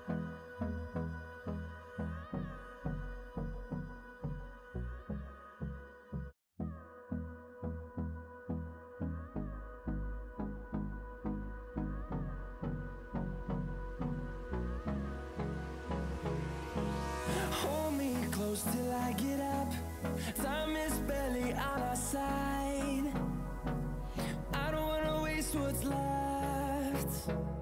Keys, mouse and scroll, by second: 0.8 click, 3.2-3.6 scroll down 1, 3.7 scroll up 1, 4.6-8.6 drag, 8.5 typing, 8.7-14.0 drag, 10.3 typing, 14.3-23.4 drag, 14.5 typing, 18.0 typing, 23.5-27.3 drag, 27.3 click.